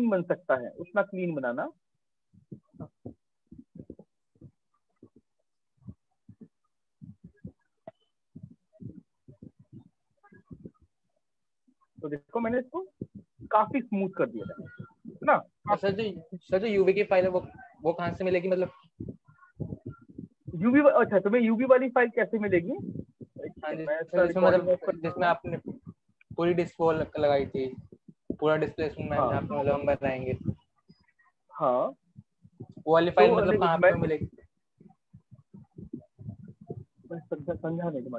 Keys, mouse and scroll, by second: 1.4 click, 2.2 click, 4.7 click, 6.3 click, 7.5 alt+click, 9.9 click, 11.3 click, 12.7 click, 14.6 right click, 15.4 alt+click, 24.0 click, 28.9 click.